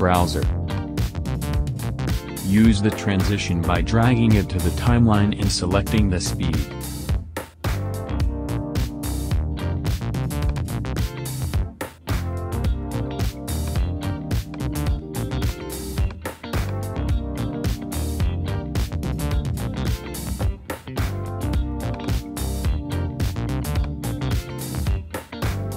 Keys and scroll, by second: 3.9 Home, 5.4 space, 9.8 space, 11.5 BackSpace, 17.6 space, 20.9 space, 22.2 BackSpace.